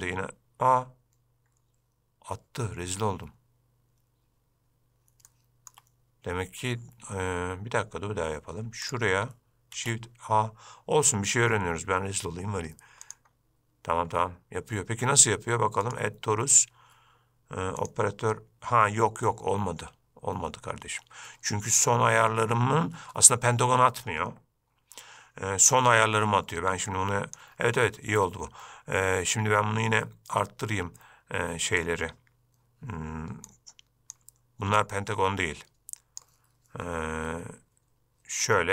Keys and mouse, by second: 5.5-5.9 shift+middle drag, 9.0 shift+right click, 9.9 shift+a, 16.2 click, 18.0 click, 27.2-27.7 drag, 33.8 click, 35.1-36.5 drag.